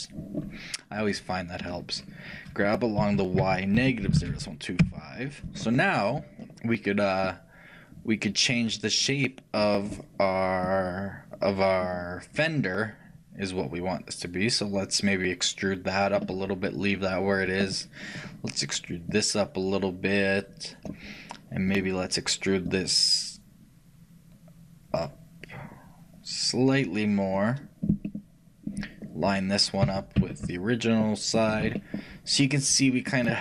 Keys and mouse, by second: 0.5-1.6 drag, 0.5 n, 1.3-3.1 right drag, 3.1 g, 7.4-9.1 drag, 10.7-12.4 drag, 19.2-20.9 drag, 19.2-20.8 right drag, 22.7-24.5 drag, 22.7-24.4 right drag, 28.2-29.9 middle drag, 29.9-31.8 right drag, 31.8-33.4 middle drag.